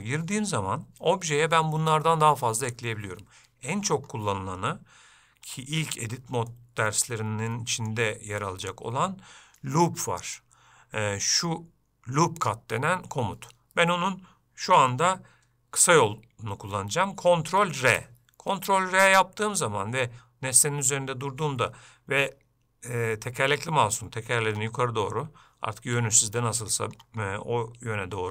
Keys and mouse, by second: 6.6 shift+middle click, 7.6 shift+middle click, 17.5 ctrl+r.